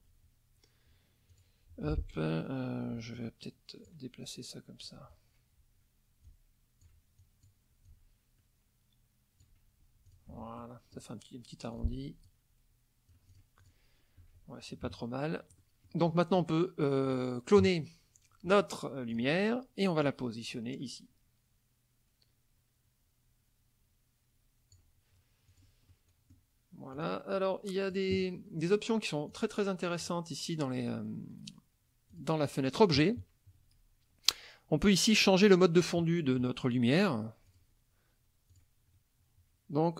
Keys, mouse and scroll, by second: 1.3 click, 1.7 F2, 3.1 ctrl+click, 6.3 ctrl+click, 7.2 ctrl+click, 7.9-9.6 ctrl+drag, 10.1 click, 10.3 F1, 10.6 middle click, 11.8 click, 12.3-13.9 drag, 14.8 KP_Subtract, 15.6 middle click, 16.1 middle click, 17.1 click, 19.1 click, 20.1-24.9 drag, 25.5 click, 25.9 middle click, 26.9 click, 27.3 click, 29.3 click, 30.0 click, 32.1 click, 37.5 click, 38.5 click.